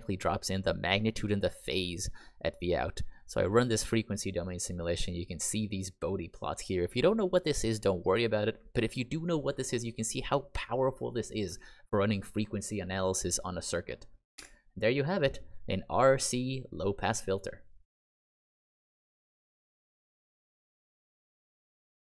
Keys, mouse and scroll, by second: 14.3 Escape.